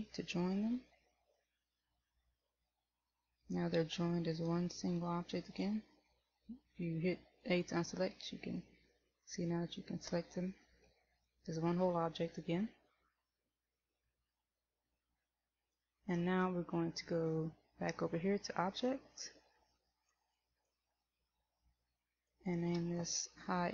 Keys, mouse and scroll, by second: 1.4 ctrl+j, 4.4 right click, 5.8 a, 8.4 right click, 11.4 shift+middle click, 20.3 click, 20.8 click, 22.3 click.